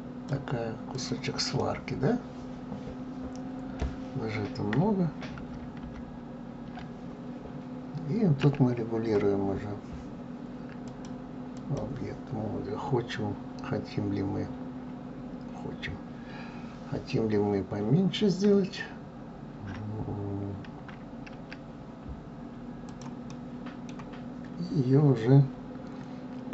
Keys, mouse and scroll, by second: 1.6-4.6 middle drag, 5.8 ctrl+z, 8.4 s, 10.8-13.9 drag, 23.3-26.3 middle drag.